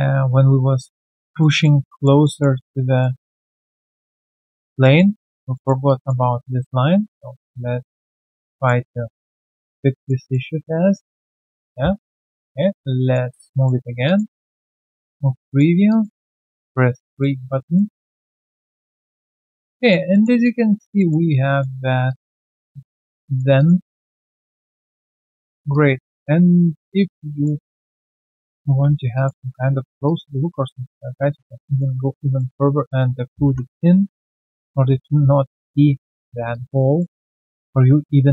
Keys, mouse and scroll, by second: 0.7 scroll down 1, 0.8 alt+middle click, 1.1 alt+click, 1.4 alt+middle click, 2.6 alt+click, 3.3 alt+click, 3.8 shift+click, 4.5 alt+click, 4.8 alt+middle click, 5.2 alt+click, 5.5 alt+middle click, 5.8 alt+click, 6.2 w, 8.1 alt+middle click, 8.8 alt+click, 9.3 alt+middle click, 10.3 middle click, 11.7 scroll down 1, 11.9 3, 12.3 alt+click, 12.8 alt+right click, 13.3 alt+click, 13.6 alt+middle click, 14.0 alt+click, 14.4 alt+middle click, 15.8 alt+click, 16.3 alt+right click, 17.7 alt+middle click, 18.1 alt+click, 18.5 alt+middle click, 19.1 alt+click, 19.5 alt+right click, 19.8 alt+click, 20.1 alt+middle click, 20.4 alt+click, 20.9 alt+middle click, 21.2 alt+click, 22.0 alt+click, 22.4 alt+right click, 22.7 alt+click, 23.0 alt+middle click, 23.2 alt+right click, 23.5 alt+click, 23.8 alt+middle click, 24.1 alt+right click, 24.5 1, 24.9 alt+click, 25.4 alt+right click, 25.7 alt+click, 26.4 right click, 27.3 double click, 27.7 alt+scroll down 1, 28.0 alt+middle click, 28.2 alt+right click, 28.4 alt+click, 28.9 w, 29.1 alt+click, 30.0 shift+click, 30.8 alt+click, 31.2 alt+right click, 31.4 alt+click, 32.1 alt+click, 32.3 alt+middle click, 33.2 alt+middle click, 33.4 3, 33.9 right click, 34.4 q, 34.5 alt+click, 34.7-35.7 alt+scroll down 3, 35.9 alt+right click, 36.0 alt+click, 36.9 alt+middle click, 37.2 alt+click.